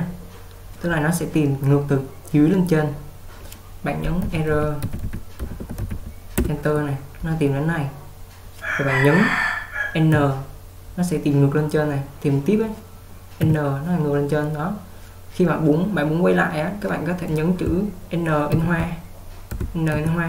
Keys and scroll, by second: 4.1-6.4 typing, 6.4 Return, 10.2 n, 13.6 n, 18.6 shift+n, 20.0 shift+n.